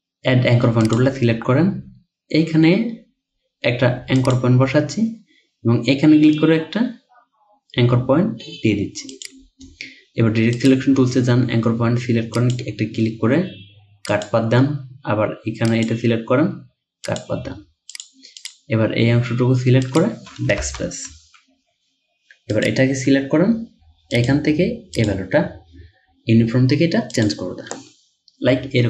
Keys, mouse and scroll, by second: 18.4 double click, 20.6 BackSpace.